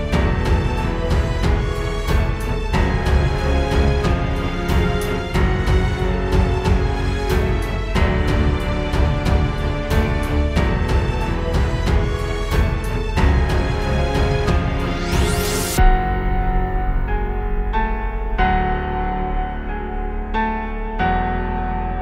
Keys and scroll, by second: 4.7 space, 5.2 super+space, 6.0 super+Tab, 6.6 super+Tab, 8.8 space, 9.8 space, 12.4 space, 15.5 space, 16.0 super+z, 20.2 space.